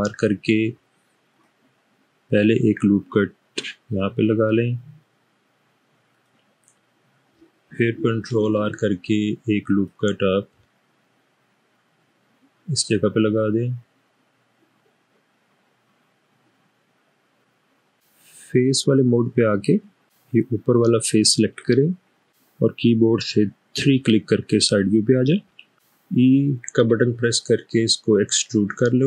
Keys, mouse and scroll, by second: 1.5 click, 8.6 ctrl+r, 9.8 click, 20.3 click, 23.8 3, 27.0 e.